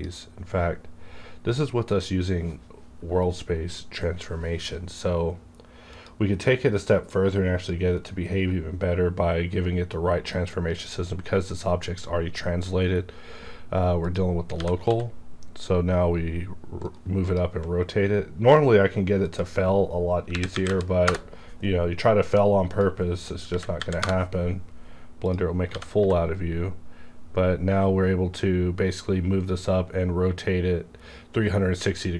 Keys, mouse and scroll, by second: 5.9-9.9 drag, 14.1 click, 14.5 g, 14.9 z, 16.9 right click, 17.2 click, 19.3 click, 20.3 KP_3, 20.5 KP_6, 20.7 KP_0, 21.0 KP_Enter, 22.6 click, 23.4 KP_Decimal, 23.8 KP_5, 23.9 KP_Enter, 25.2 click, 25.7 g, 26.0 z.